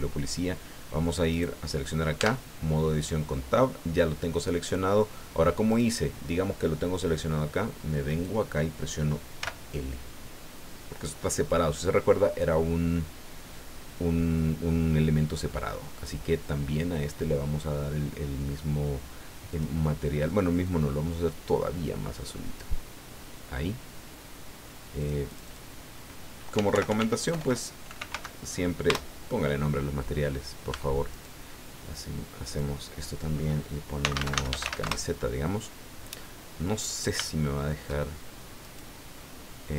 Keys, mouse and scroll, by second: 1.3 right click, 2.2 Tab, 5.7 right click, 8.1 right click, 9.4 l, 15.9 click, 19.5 click, 20.6-22.7 drag, 25.0 click, 25.3 click, 26.3-28.6 typing, 28.9 Return, 30.7 Tab, 31.1 right click, 32.5 click, 33.7-35.2 typing, 36.2 click, 37.2 shift+click, 38.6 right click.